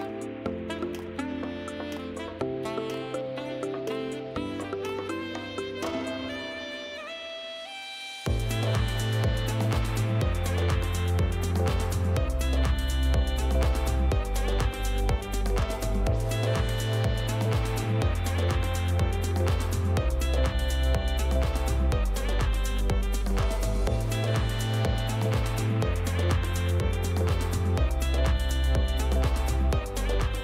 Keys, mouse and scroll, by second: 0.6 click, 1.3-3.7 typing, 4.1 right click, 4.6 right click, 6.3 right click, 8.2 click, 14.3 right click, 15.5 click, 17.4 right click, 24.3 click, 26.5 click, 26.7 click, 27.8 click, 28.7 click, 29.2 click, 29.8 click.